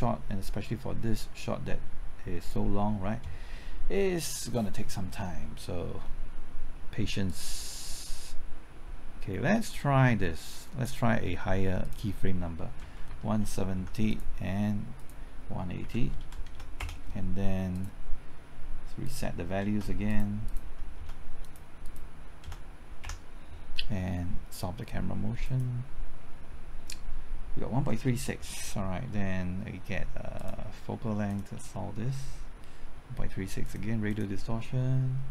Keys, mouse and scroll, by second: 12.7 KP_1, 13.2 KP_7, 13.7 KP_0, 14.0 click, 15.8 KP_1, 16.2 KP_8, 16.4 KP_0, 16.7 KP_Enter, 17.7 click, 19.6 KP_0, 20.0 click, 20.9 KP_0, 21.4 click, 22.4 KP_0, 23.0 KP_Enter, 25.4-35.3 drag.